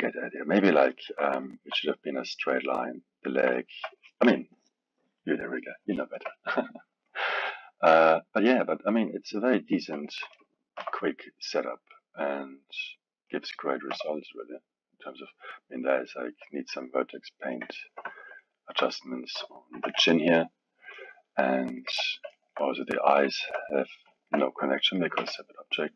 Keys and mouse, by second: 0.9-7.1 alt+middle drag, 7.1 click, 9.1 click, 9.4-9.9 middle drag, 9.9 KP_3, 10.8 r, 13.3 click, 13.9 r, 17.8-19.7 ctrl+middle drag, 19.7 r, 21.5-21.9 middle drag, 21.9 KP_1, 22.3-25.2 alt+middle drag, 25.2 KP_1.